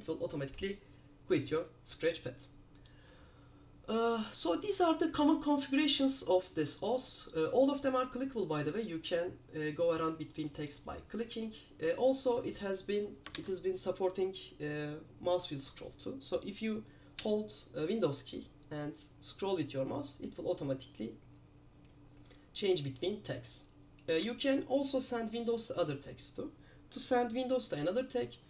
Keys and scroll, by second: 13.5 super+s.